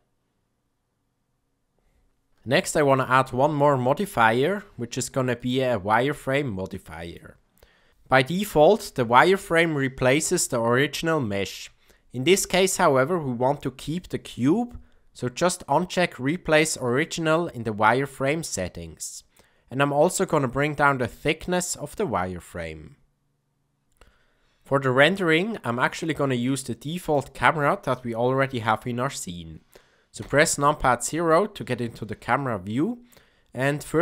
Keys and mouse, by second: 1.3 click, 2.8 click, 4.3 click, 5.3-7.1 drag, 16.8 click, 20.3-23.8 shift+drag, 25.2-25.7 middle drag, 26.0-26.3 shift+middle drag, 26.9 click, 30.1 KP_0, 32.3-33.0 shift+middle drag.